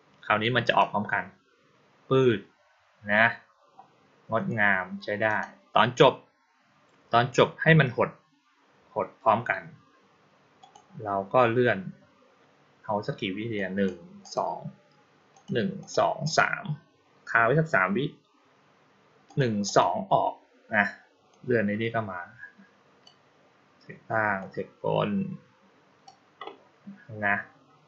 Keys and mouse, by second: 0.5 click, 5.1 click, 10.5 click, 13.4 click, 14.1 click, 15.2 click, 15.7 click, 16.1 click, 19.1 click, 19.5 click, 21.2-22.9 drag, 24.2-25.9 drag.